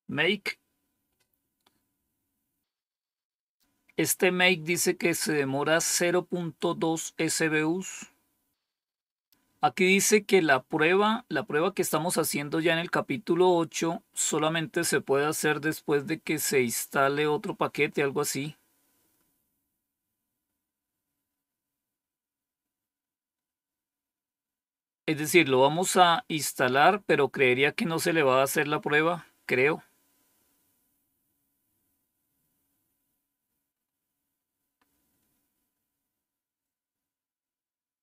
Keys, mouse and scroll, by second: 2.7-3.5 scroll down 1, 3.5-4.6 scroll up 1, 4.6-5.2 scroll up 1, 5.2-5.8 scroll up 1, 5.8-7.8 scroll up 1, 7.8 scroll up 1, 7.9-8.6 scroll down 1, 21.8-22.6 scroll down 1, 26.6-27.7 scroll down 2, 27.8-28.7 scroll down 2, 33.6-35.5 scroll up 2, 35.5 scroll up 1, 35.8-36.6 scroll down 1.